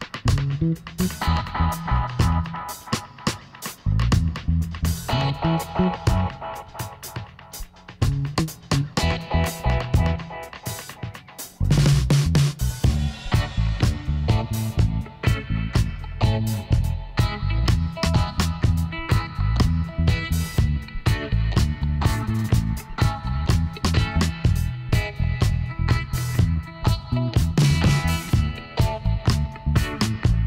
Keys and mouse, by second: 0.7-5.2 drag, 0.9 g, 2.2 g, 4.6 g, 5.4 click, 6.4 ctrl+r, 8.8 ctrl+z, 9.9 ctrl+r, 11.3 click, 12.1 g, 14.9-19.5 drag, 19.5-21.5 middle drag, 21.5-23.2 right drag, 23.9-26.3 middle drag, 25.6 Tab, 26.5 middle click, 27.2 z.